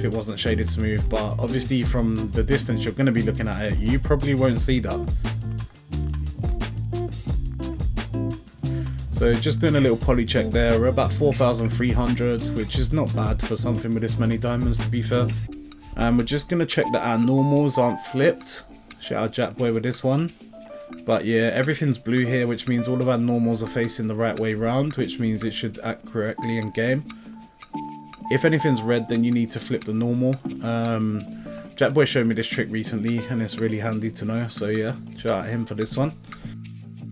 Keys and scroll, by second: 14.7 a.